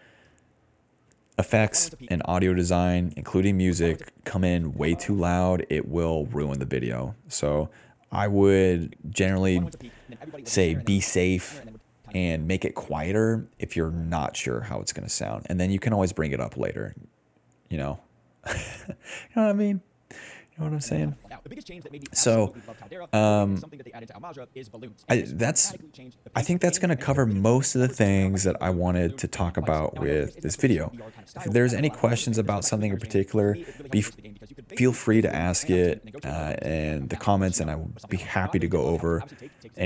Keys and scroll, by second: 1.3-4.0 typing, 5.9-7.0 typing, 8.5 s, 8.6 s, 9.0 space, 9.4 d, 11.0-13.1 typing, 15.5 ctrl+z, 20.7 space, 21.6 s, 22.0 s, 25.0 s, 25.6 s, 27.2 s, 30.3 d, 33.2 d, 34.7 d, 36.1 s, 37.4-39.8 typing.